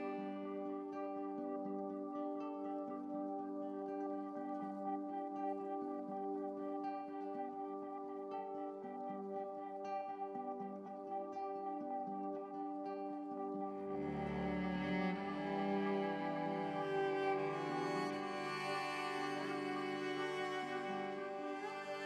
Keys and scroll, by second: 10.7 ctrl+u, 16.3 ctrl+l.